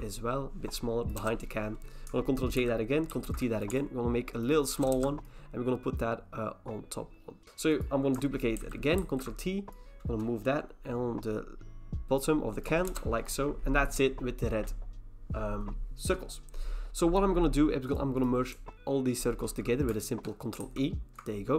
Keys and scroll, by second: 1.2 Return, 2.6 ctrl+j, 3.1 ctrl+t, 4.9 Return, 8.6 Return, 8.6 ctrl+j, 9.0 ctrl+t, 12.9 Return, 20.6 ctrl+e.